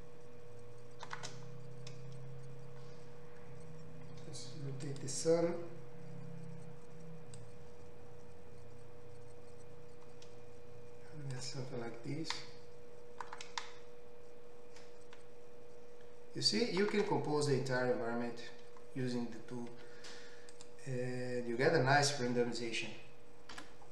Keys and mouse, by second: 5.1-7.4 middle drag, 7.4-23.9 drag, 19.8 z.